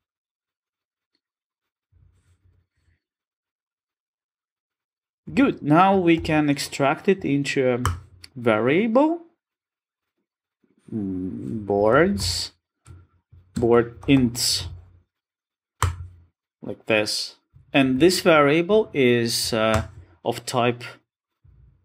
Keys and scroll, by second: 0.9 Return, 6.2 alt+super+v, 19.8 alt+Return.